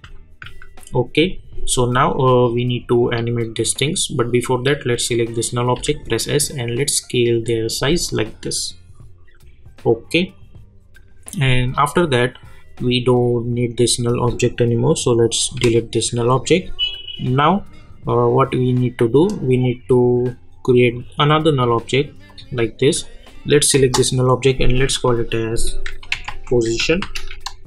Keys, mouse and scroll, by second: 0.4 u, 2.1 click, 4.6 click, 5.7 s, 6.5-11.8 drag, 19.3 right click, 20.9 click, 23.7 Return, 25.6-27.6 typing.